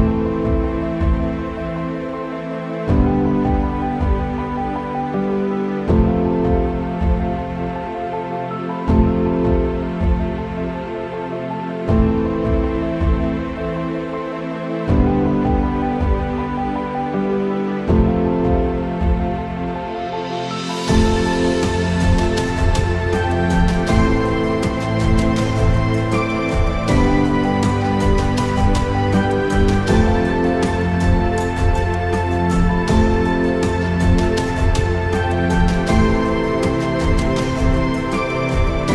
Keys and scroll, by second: 6.8 ctrl+z, 6.9 ctrl+z, 7.5 ctrl+z, 8.3 ctrl+z, 9.5 ctrl+z, 10.4 ctrl+z, 11.0 ctrl+z, 11.1 ctrl+z, 14.0 ctrl+z, 14.1 ctrl+z, 14.5 ctrl+z, 15.3 ctrl+z, 16.0 ctrl+z, 16.2 ctrl+z, 16.6 ctrl+z, 17.6 ctrl+z, 17.9 ctrl+z, 18.1 ctrl+z, 18.4 ctrl+z, 18.5 ctrl+z, 18.9 [, 19.8 ctrl+z, 20.1 ctrl+z, 20.6 ctrl+z, 20.7 ctrl+z, 21.4 ctrl+z, 21.4 ctrl+z, 22.4 ctrl+z, 23.2 ctrl+z, 23.6 ctrl+z, 26.5 ctrl+z, 27.0 ctrl+z, 27.1 ctrl+z, 28.3 ctrl+z, 30.9 ctrl+z, 33.3 ctrl+z, 33.4 ctrl+z, 34.8 KP_0, 35.6 ctrl+z, 36.6 ctrl+z, 36.7 ctrl+z.